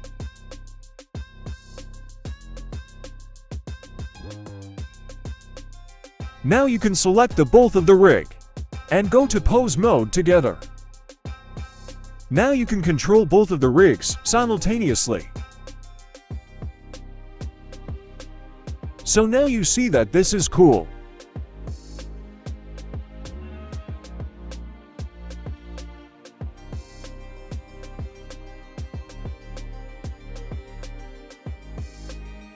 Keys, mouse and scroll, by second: 0.0-1.0 drag, 1.6-2.0 scroll down 1, 2.2 shift+middle drag, 3.1-5.0 drag, 5.9 right click, 6.8 shift+right click, 7.6-8.7 middle drag, 9.8-10.9 drag, 11.7 right drag, 12.5 middle click, 13.6 right click, 14.4 g, 15.6-16.0 scroll down 2, 15.9 middle click, 16.4 right click, 16.8 right click, 16.9 g, 18.2 right click, 18.5 g, 21.1-22.2 drag, 22.5 click, 22.5 right click, 22.9 x, 23.6 click, 23.6 right click, 25.0 click, 25.0 right click, 26.0-26.6 drag, 27.4-28.0 drag, 29.0-29.8 drag, 30.3 a, 30.9 alt+g, 31.2 alt+r, 31.4-32.0 scroll up 1, 32.0-32.4 scroll up 1, 32.4 right click.